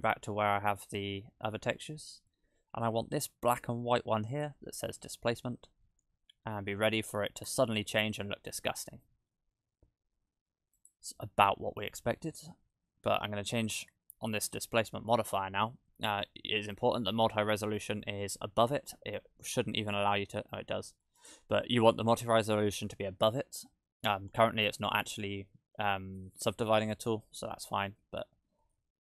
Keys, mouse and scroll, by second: 10.8 click, 19.8 click, 21.2 click.